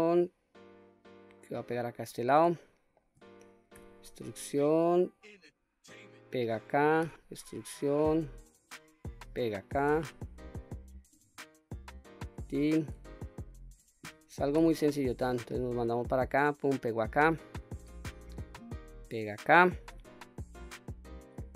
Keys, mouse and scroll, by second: 1.8 click, 2.6 shift+middle click, 3.8 e, 6.2 click, 7.1 e, 9.2 click, 9.9 e, 12.2 click, 13.2 shift+middle click, 14.7 e, 17.0 click, 18.0 e, 19.2 click, 20.0 e.